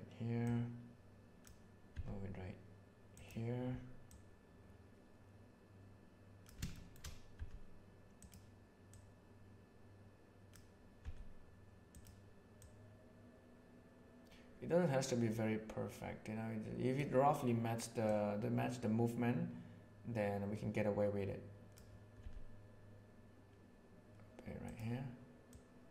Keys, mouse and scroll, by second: 0.4-1.5 drag, 1.9 g, 4.1-6.5 drag, 6.7 shift+middle drag, 7.3 g, 8.8-10.5 drag, 11.0 g, 12.5-16.0 drag, 16.0 right click, 18.0-21.7 right drag, 22.2 g, 25.5-25.9 drag.